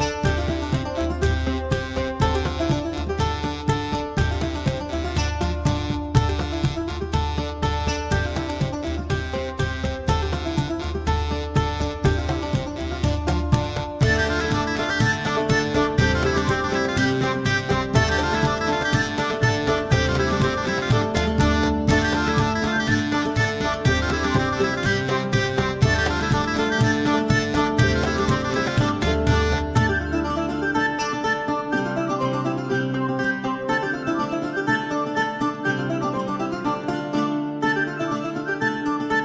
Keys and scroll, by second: 27.5 Delete.